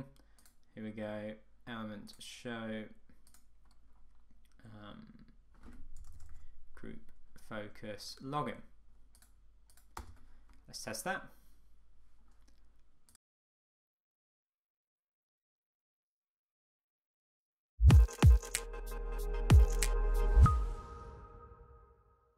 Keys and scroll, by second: 10.1 Return.